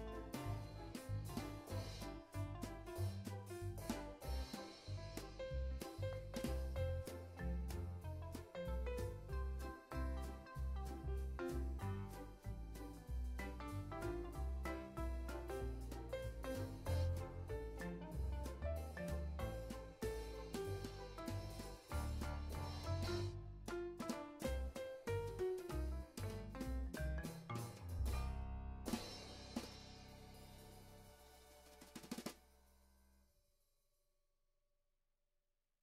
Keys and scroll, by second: 9.9 z, 12.0 super+s, 12.2 x, 13.4 space, 17.3 space, 35.1 alt+shift+s.